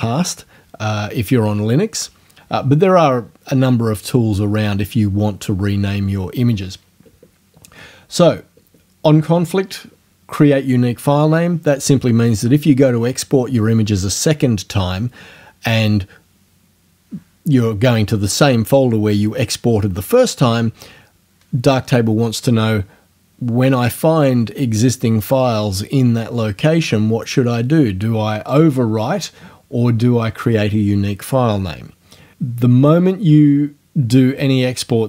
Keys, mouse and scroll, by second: 28.5 click.